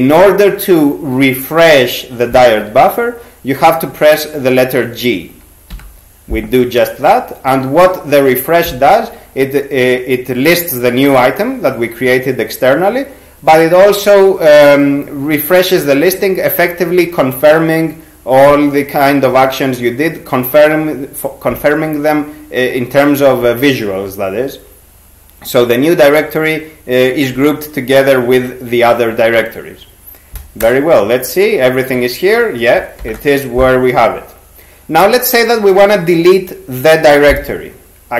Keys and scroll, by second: 5.7 g, 30.6 Return, 33.0 ^.